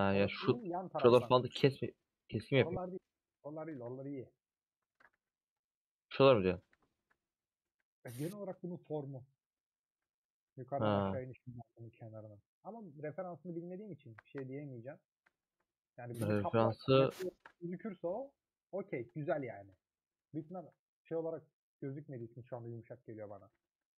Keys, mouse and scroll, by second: 0.9 /, 1.4 Tab, 1.5-3.8 middle drag, 3.8 3, 3.8-4.9 drag, 4.9 ctrl+KP_Add, 5.1 x, 5.8 middle click, 6.6 3, 10.5 ;, 10.7-13.4 middle drag, 13.4 2, 14.5-15.5 middle drag, 15.9-17.4 middle drag, 17.8-20.5 middle drag, 20.5 ctrl+click, 22.2 shift+click, 22.8 middle click, 23.3 a.